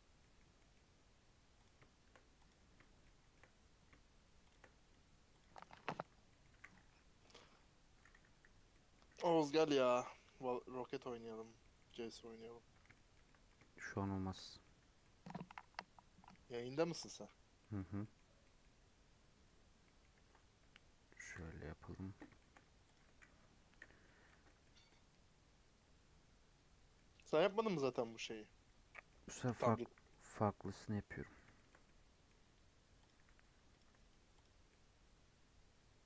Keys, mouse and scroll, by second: 0.1 middle click, 0.3 scroll down 4, 0.5 middle click, 0.7-1.5 scroll up 5, 1.5 click, 2.3 click, 3.0-4.4 shift+middle drag, 4.4 shift+click, 4.8 right click, 5.5 scroll down 1, 5.7 middle click, 6.5 a, 6.8 u, 7.5-10.5 middle drag, 10.5 click, 10.6-11.5 scroll down 2, 11.5 middle click, 11.8-12.2 scroll down 6, 12.2 middle click, 12.3 scroll up 1, 12.6 scroll down 2, 12.9-14.7 shift+middle drag, 14.7 Tab, 15.0 middle click, 15.2-15.5 scroll up 3, 15.5 Tab, 15.7-20.1 middle drag, 20.1 Tab, 21.3 /, 21.8 /, 22.3 shift+middle click, 22.9 click, 23.7 /, 24.0 middle click, 24.2 Tab, 24.4 middle click, 24.6 scroll up 1, 24.8-27.1 middle drag, 27.1-27.5 scroll up 1, 28.0 scroll down 2, 28.2-29.6 middle drag, 30.1-33.0 middle drag, 33.0 right click, 33.7 alt+click, 34.4 right click, 34.7-36.0 middle drag.